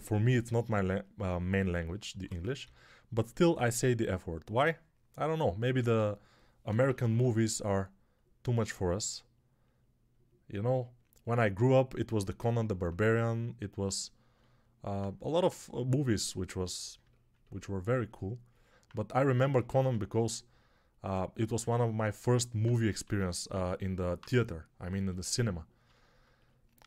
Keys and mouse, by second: 1.5 alt+q, 2.5 g, 5.7 alt+q, 6.6 ], 6.7 ], 6.9 ], 7.0 ], 22.9-24.1 typing.